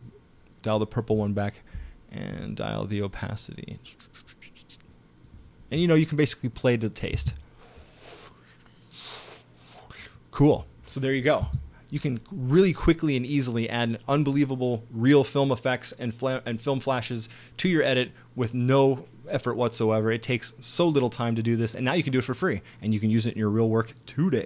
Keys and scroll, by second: 7.1 space, 11.4 space.